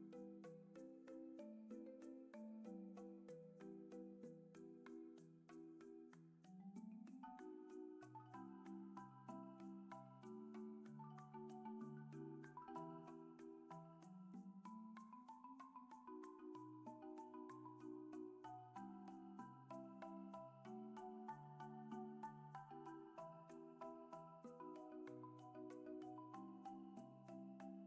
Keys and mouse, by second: 2.1-4.4 drag, 8.4 click, 9.8 click, 10.7 click, 12.1-17.7 drag, 19.7-20.9 drag, 22.2-23.3 drag, 27.0-27.8 drag.